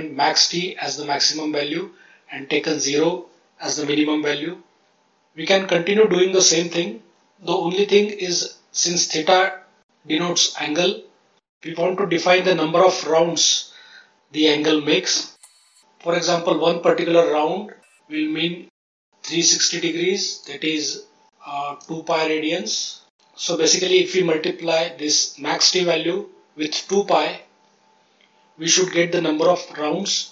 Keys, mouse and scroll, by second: 15.4 shift+space, 16.2 click, 19.1 click, 19.9 click, 20.3 click, 20.8 click, 21.4 click, 22.0 click, 22.3 click, 22.6 click, 28.8 ctrl+z, 29.0 ctrl+z.